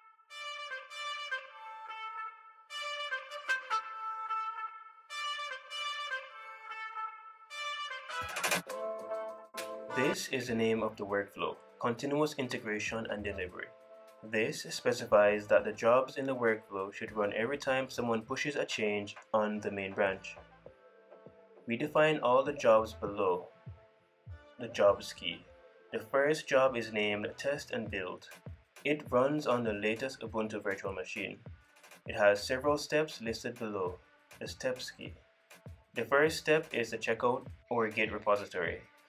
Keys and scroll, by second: 0.2 super+c, 0.4 super+v, 3.5 super+Right, 4.8 super+c, 5.0 super+v, 7.9 super+s.